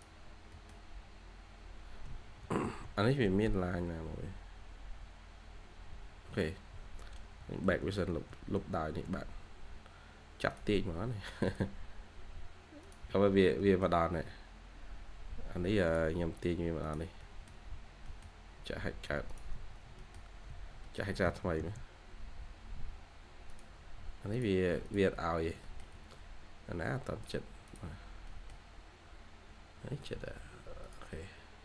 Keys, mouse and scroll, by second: 0.2 scroll down 1, 0.4 middle click, 2.6 ctrl+z, 3.3-4.5 scroll down 1, 4.5-5.5 scroll up 1, 7.6 ctrl+z, 8.1 ctrl+z, 9.1 scroll down 1, 9.9-10.9 scroll up 1, 13.2 scroll down 1, 13.5 middle click, 14.3-16.1 scroll up 1, 17.1 middle click, 17.7 scroll down 1, 18.0 middle click, 19.4 Escape, 19.6 scroll down 1, 19.9 middle click, 20.3-20.8 scroll up 1, 20.8 middle click, 21.2 h, 21.6-22.0 scroll up 1, 22.0 h, 25.0 Escape, 25.1 scroll down 1, 25.3 Escape, 25.5 middle click, 25.7-26.8 scroll down 2, 25.8 Escape, 26.8-27.6 scroll up 1, 27.9 scroll down 1, 28.2 middle click, 29.5-30.1 scroll up 1, 30.1 Escape, 31.1 scroll down 1.